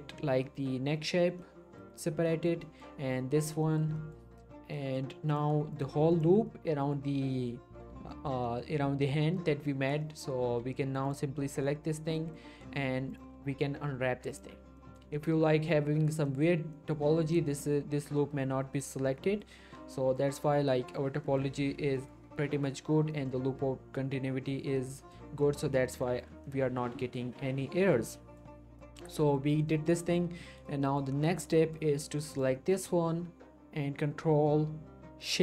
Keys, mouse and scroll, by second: 0.0 shift+middle click, 0.1-0.4 shift+scroll up 1, 0.4 middle click, 2.3 scroll down 1, 2.6 shift+middle click, 3.6 shift+middle click, 3.7 shift+scroll down 1, 4.0 middle click, 5.3 click, 5.7 alt+shift+click, 6.4 alt+shift+scroll down 1, 6.8-7.1 shift+middle click, 8.4 shift+middle click, 8.7-9.2 scroll up 1, 9.5-9.9 middle click, 10.2 scroll up 1, 11.1 shift+click, 11.5 scroll down 1, 11.6-12.5 middle click, 12.4 scroll up 1, 13.1 shift+click, 13.4 scroll down 1, 13.8 ctrl+e, 14.3 click, 14.6 scroll down 1, 14.8 middle click, 15.1 shift+middle click, 15.3-16.1 shift+scroll up 1, 16.1 scroll, 16.3 middle click, 16.7 scroll up 1, 17.3 middle click, 17.5-18.9 scroll up 1, 18.9 scroll down 1, 19.1-19.7 middle click, 20.1-20.7 scroll up 1, 20.7 middle click, 21.3 scroll up 1, 22.0 middle click, 25.1 middle click, 25.8-26.4 scroll up 2, 26.0 middle click, 26.4-27.3 middle click, 27.4 scroll down 1, 27.5-28.1 middle click, 28.7 scroll down 1, 28.8 middle click, 29.2 shift+middle click, 29.5 scroll down 1, 29.9 shift+middle click, 30.1-30.4 scroll up 1, 30.4 middle click, 31.3 scroll down 1, 32.3 click, 32.5 middle click, 32.9 shift+middle click, 33.3 scroll up 1.